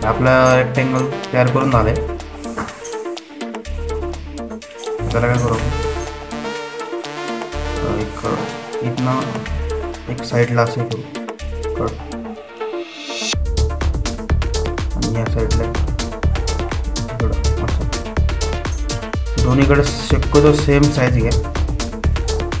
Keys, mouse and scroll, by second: 2.1 typing, 8.3-16.4 drag, 16.4-22.6 drag.